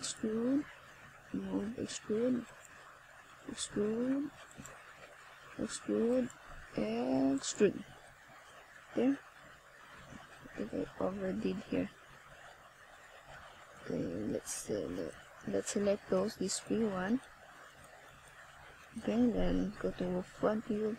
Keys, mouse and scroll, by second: 3.1 click, 8.0 click, 14.0 right click, 15.8 click, 17.0 click, 17.7 click, 18.8 o, 20.6 click.